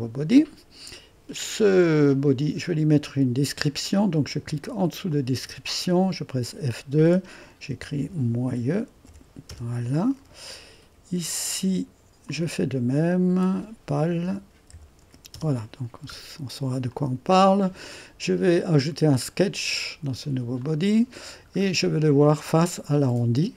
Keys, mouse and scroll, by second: 1.6 click, 2.4 click, 5.1-6.2 drag, 6.3 F2, 7.4-9.5 typing, 11.3-13.3 drag, 13.3 F2, 14.0-15.5 typing, 16.9-20.4 drag, 20.6 click, 22.3-23.5 drag.